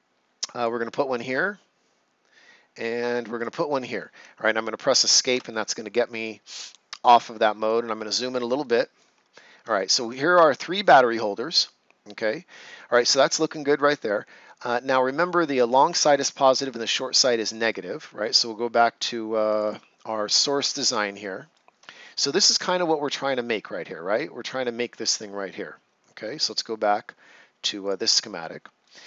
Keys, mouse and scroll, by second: 3.3 click, 5.2 Escape, 7.8-8.1 ctrl+scroll up 1, 8.7 right click, 9.2 ctrl+scroll up 1, 9.7 right click, 17.5 right click, 19.4 click, 21.1 right click, 21.8 ctrl+scroll up 1, 22.2 right click, 27.8 click, 28.8 right click.